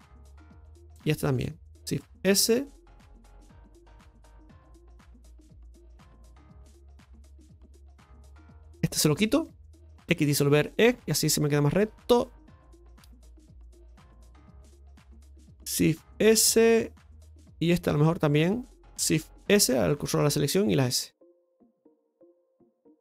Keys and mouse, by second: 0.6 right click, 0.9 alt+shift+right click, 1.7 shift+s, 4.3 s, 5.2 KP_Divide, 6.2 shift+middle click, 7.4 shift+middle click, 8.8 right click, 9.1 alt+shift+right click, 9.3 alt+shift+right click, 11.6 right click, 12.0 alt+shift+right click, 12.8-14.2 drag, 17.2 s, 17.8 right click, 18.2 alt+shift+right click, 18.3 right click, 21.8 s, 22.2 middle click.